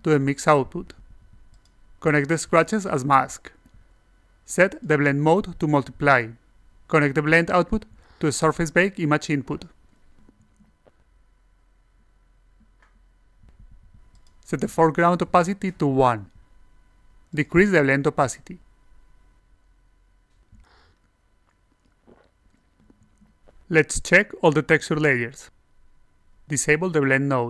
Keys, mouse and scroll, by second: 0.0 alt+click, 1.2 alt+click, 2.1 click, 5.6 click, 6.6 click, 7.7-8.8 drag, 9.9 click, 10.5 alt+click, 10.8 click, 11.3 alt+click, 11.8 click, 12.0 alt+click, 12.4 click, 12.8 click, 13.3 alt+click, 14.4 click, 16.3-20.9 drag, 21.2 click, 22.4-25.5 alt+drag, 26.8 click, 27.0 e.